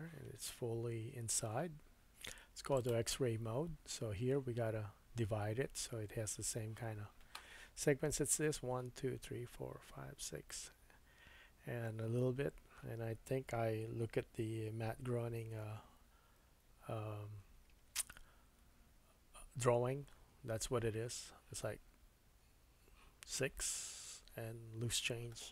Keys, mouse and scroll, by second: 16.4 ctrl+r.